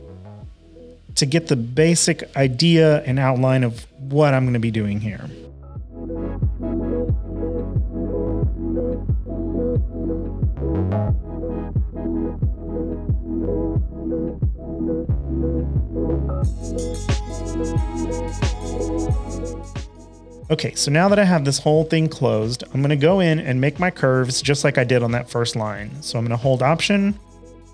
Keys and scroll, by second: 0.6 typing, 9.0 typing.